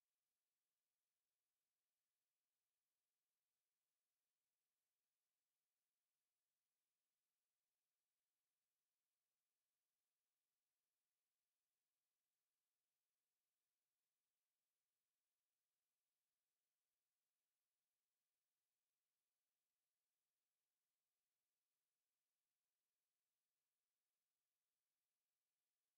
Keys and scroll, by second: 0.5 ctrl+a, 18.9 ctrl+x, 20.4 ctrl+v.